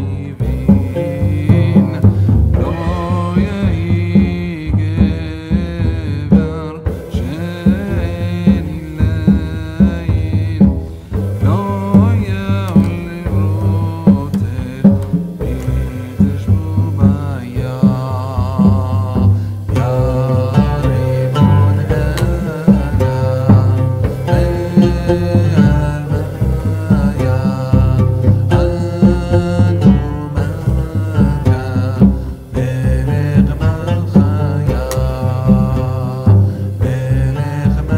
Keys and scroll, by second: 1.8 Return, 3.9 ctrl+a, 5.2 ctrl+v.